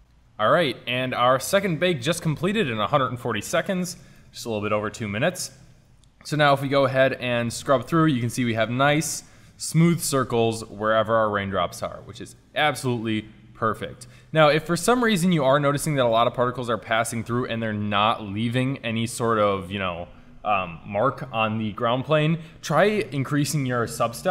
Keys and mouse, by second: 4.2-6.8 middle drag, 6.8 Right, 10.8 Left, 11.0 Left, 11.1 Left, 11.3 Left, 11.5 Left, 11.7 Left, 11.9 Left, 15.4 shift+z, 16.0 Right, 16.2 Right.